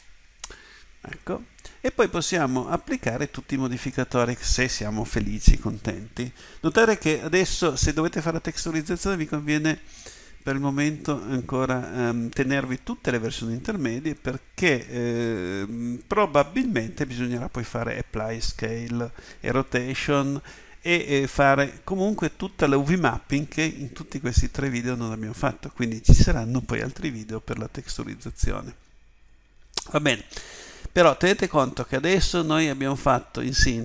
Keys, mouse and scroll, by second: 0.0 Return.